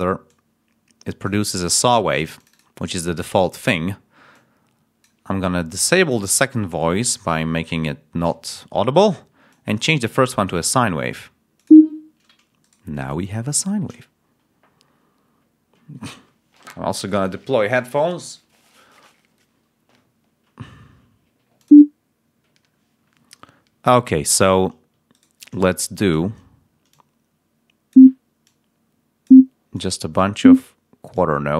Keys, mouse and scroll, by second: 0.2-1.4 drag, 2.3 click, 4.2 click, 6.2-7.2 drag, 9.4 click, 11.5 click, 12.5 shift+right click, 21.5 click, 25.0 shift+right click, 25.7 shift+click, 26.8-28.0 drag, 28.3-29.4 drag.